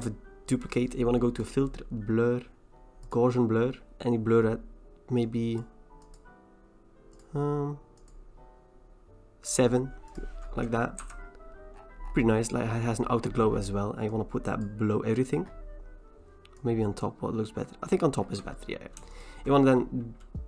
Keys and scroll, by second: 11.1 v.